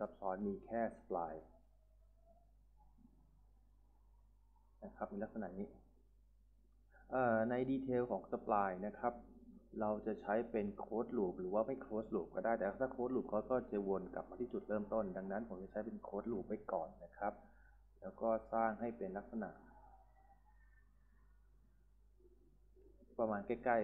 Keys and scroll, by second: 1.0-6.4 typing, 16.9-19.3 typing.